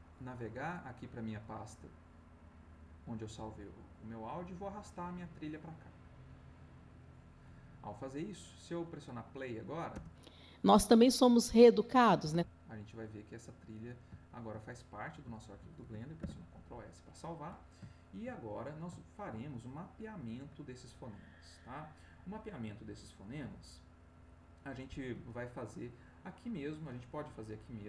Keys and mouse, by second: 1.4 click, 3.4 click, 5.3-6.8 drag, 7.8 middle click, 9.9 space, 12.9 click, 14.2-15.3 ctrl+drag, 15.4 ctrl+middle click, 16.2 ctrl+s, 17.9 ctrl+click, 18.4 ctrl+click, 19.0 ctrl+click, 19.5 ctrl+click, 19.6 ctrl+middle click.